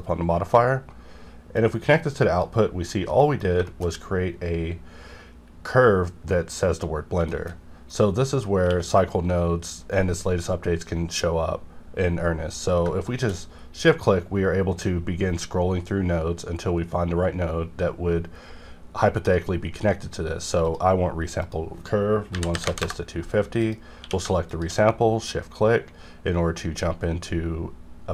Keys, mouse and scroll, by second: 0.4 scroll up 1, 1.5 click, 2.7-3.1 scroll up 1, 3.1 middle click, 3.4 scroll up 1, 3.6 shift+middle click, 4.0-6.1 scroll up 1, 6.8-7.1 scroll down 1, 7.4 shift+middle click, 7.5-7.9 shift+scroll down 1, 7.9 click, 8.6 q, 12.8 q, 13.0 shift+click, 13.6 scroll up 1, 14.2-14.8 scroll up 1, 14.8-15.5 scroll down 1, 15.5 scroll up 1, 16.0 scroll down 1, 16.7-17.7 scroll up 1, 17.8-18.7 scroll up 1, 18.7-20.6 scroll down 1, 20.6 click, 22.3 KP_2, 22.5 KP_5, 22.6 KP_0, 22.8 KP_Enter, 23.6 click, 23.6 click, 24.0 q, 24.5 shift+click, 24.9-26.1 scroll up 3, 26.1-27.2 scroll down 2, 27.2 scroll down 1, 27.3-28.1 scroll up 3.